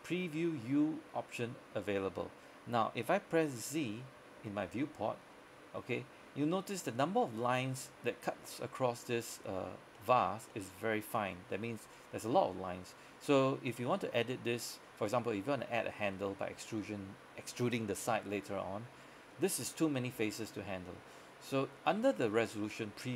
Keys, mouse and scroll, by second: 4.8 click, 4.8 z, 6.6-8.9 scroll up 1, 8.9 middle click, 9.8 scroll up 1, 10.0 middle click, 10.3 scroll down 1, 10.6 middle click.